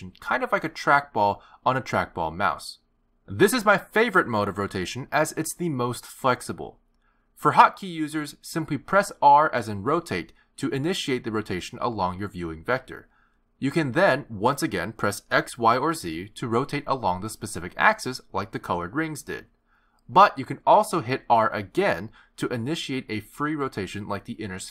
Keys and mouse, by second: 9.9 r.